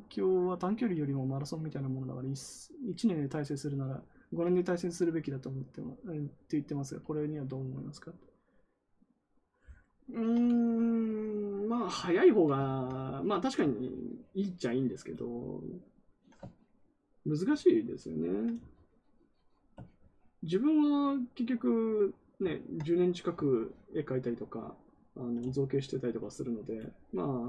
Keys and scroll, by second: 12.6 ctrl+z.